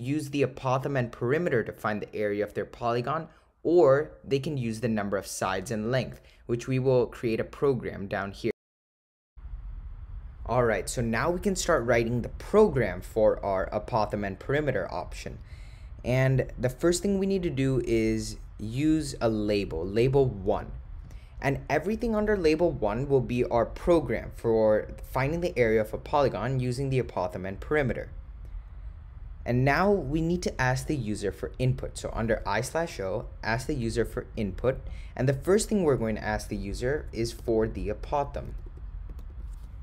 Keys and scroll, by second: 18.9 9, 20.0 1, 21.1 Return, 31.3 Right, 33.0 Return, 37.5-39.4 typing.